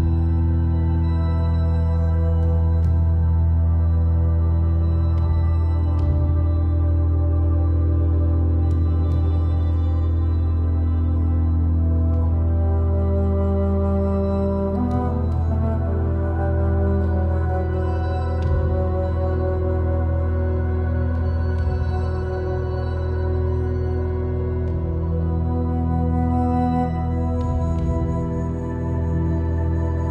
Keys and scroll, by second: 14.6-15.5 typing.